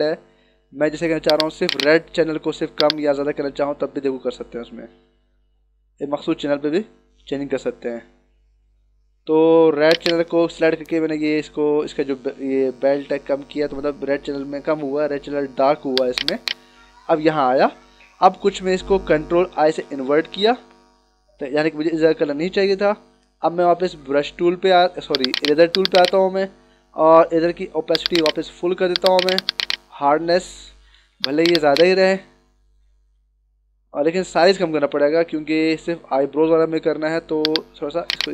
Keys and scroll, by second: 19.6 ctrl+i, 31.0 d, 31.6 space, 33.4 [, 35.3 ctrl+=, 36.6 [.